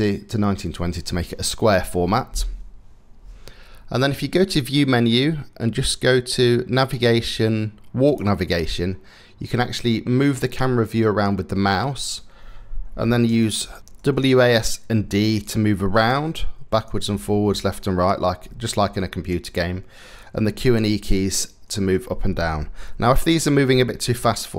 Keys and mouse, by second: 4.1-10.9 drag, 18.5 click, 24.4-24.5 drag.